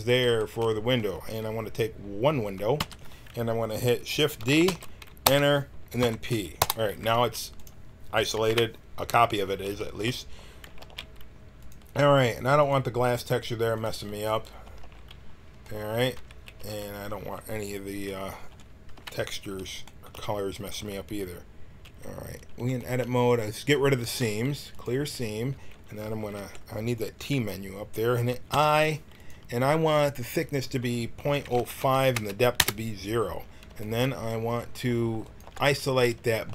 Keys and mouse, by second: 2.7 l, 4.6 shift+d, 6.0 p, 7.1 Tab, 8.4 KP_1, 10.6 g, 12.6-14.6 drag, 14.6 z, 14.8 z, 16.1 Tab, 16.5 a, 18.9 KP_1, 24.0 ctrl+e, 26.3 t, 28.5 i, 30.4-32.1 drag, 33.8-35.2 middle drag, 35.2-36.5 drag.